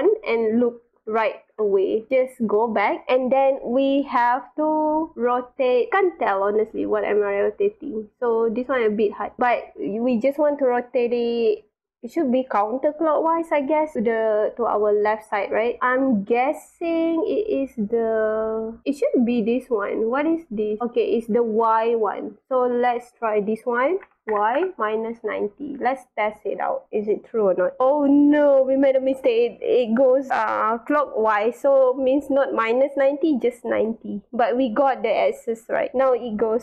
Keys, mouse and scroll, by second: 0.0-2.0 typing, 2.8 click, 4.5 click, 5.6-5.9 scroll up 3, 5.9 click, 14.7 scroll down 1, 16.5-18.8 drag, 19.4 click, 22.4 click, 27.8-29.0 drag, 32.1 click, 35.1 click, 35.9-36.6 drag.